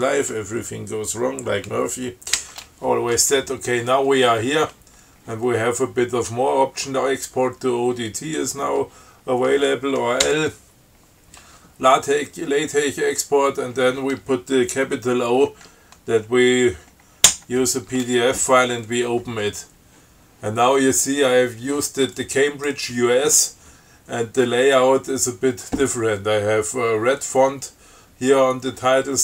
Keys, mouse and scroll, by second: 2.6 ctrl+e, 10.5 l, 17.6 shift+o, 22.4 click.